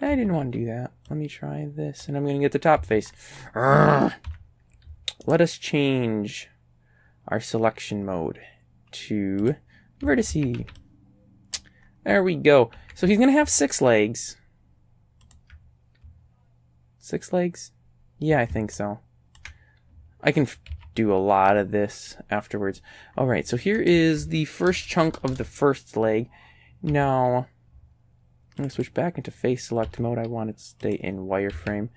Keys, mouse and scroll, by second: 0.1 a, 0.4 b, 1.1-2.2 drag, 2.8 a, 3.2-3.7 scroll up 2, 4.3 z, 5.3 right click, 9.5 click, 10.1 a, 10.3 a, 10.7 b, 10.8 click, 11.8-12.4 scroll down 1, 12.8 g, 15.3 ctrl+click, 18.8 ctrl+click, 20.7 a, 21.5 click, 23.1 scroll up 1, 23.8 right click, 24.7 ctrl+KP_Add, 24.8 ctrl+KP_Add, 26.9 z, 28.6 click, 29.9 z, 30.9 click, 31.6 a.